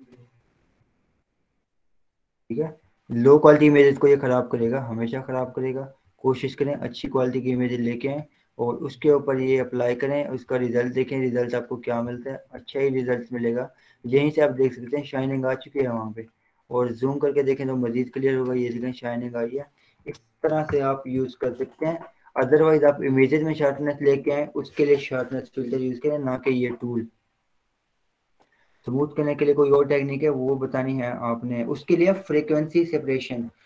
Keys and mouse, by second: 0.2 click, 12.6 ctrl+0, 13.0 z, 15.1 click, 20.1 ctrl+w, 20.5 Down, 21.0 Return, 25.1 click, 27.1-31.5 drag.